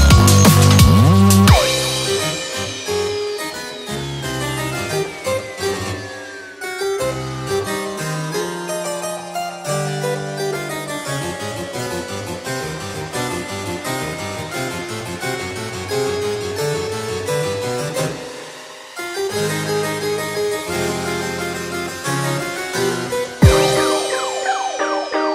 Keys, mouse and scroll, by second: 0.4 click, 0.6 click, 0.6 g, 0.6 g, 1.6 click, 1.6 g, 1.7 g, 2.4 click, 2.5 g, 2.7 g, 3.8 click, 3.9 click, 3.9 g, 4.6 click, 4.8 g, 4.8 g, 6.3 click, 6.3 g, 6.3 g, 7.9 click, 7.9 g, 8.0 g, 9.5 click, 9.5 g, 9.6 g, 11.0 click, 11.0 g, 11.1 g, 12.4 click, 12.4 g, 12.5 g, 14.3 click, 14.3 g, 14.4 g, 15.9 click, 15.9 g, 15.9 g, 17.3 click, 17.3 g, 17.5 g, 19.5 click, 19.5 scroll down 2, 19.5 g, 19.6 g, 21.5 click, 21.8 click, 22.0 g, 23.7 click, 23.8 g.